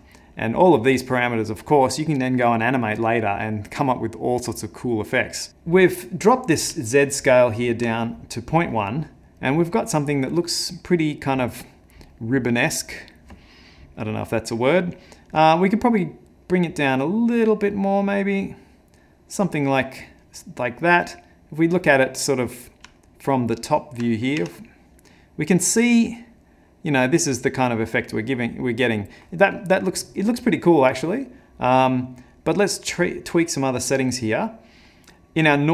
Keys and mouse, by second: 5.5 middle click, 6.8 middle click, 7.0 ctrl+middle click, 7.8 middle click, 10.8 middle click, 11.6 middle click, 12.1 middle click, 12.9 middle click, 15.7 shift+click, 21.0 middle click, 21.8 middle click, 22.4 middle click, 23.0 ctrl+middle click, 23.8 ctrl+middle click, 24.4 `, 31.3 middle click, 33.4 middle click, 35.5 click.